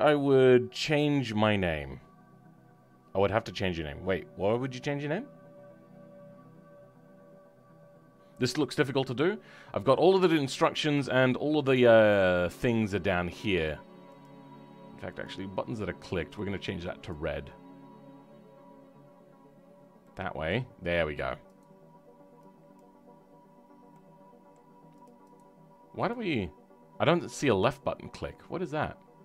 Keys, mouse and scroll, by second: 16.3-20.1 drag, 20.1-22.7 middle drag, 22.7 click, 23.5-23.8 scroll down 2, 23.8-25.0 middle drag, 25.0 click.